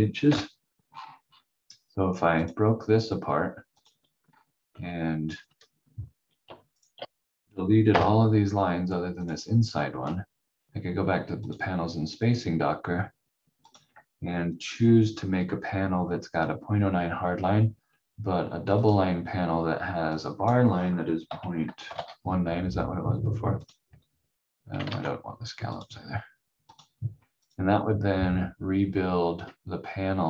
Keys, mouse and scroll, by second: 0.3 Delete, 0.9-1.5 scroll down 1, 2.4 click, 4.2 scroll down 1, 4.7 v, 5.3-6.4 scroll up 1, 6.7 shift+click, 7.9 Delete, 9.2 click, 18.7 click, 21.3-22.4 typing, 23.6 click, 24.8 ctrl+z, 25.7 click.